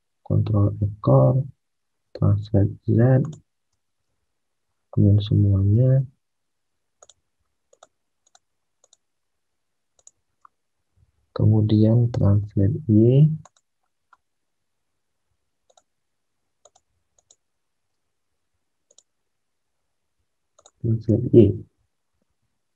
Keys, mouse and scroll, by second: 1.0 alt+Tab, 1.9 alt+Tab, 4.0 alt+Tab, 4.3 alt+Tab, 5.5 alt+Tab, 5.8 alt+Tab, 10.8 alt+Tab, 12.1 alt+Tab, 22.2 alt+Tab.